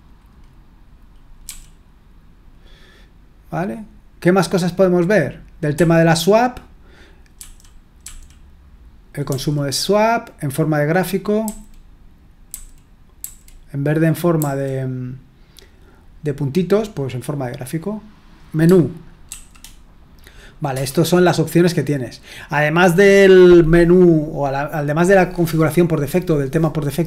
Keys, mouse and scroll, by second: 1.4 e, 8.0 typing, 11.4 g, 12.4-13.2 typing, 14.4 g, 19.3 shift+m, 20.7 Return.